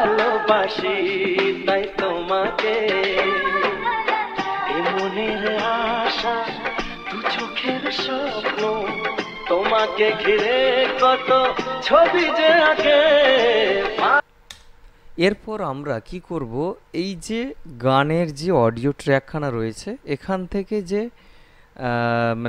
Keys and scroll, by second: 14.4 space.